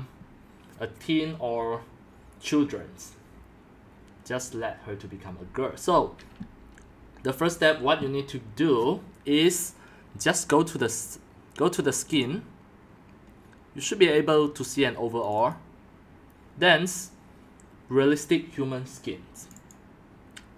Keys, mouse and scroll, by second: 8.7 scroll, 12.1 click, 13.6-15.3 drag, 19.5 click, 19.7 click.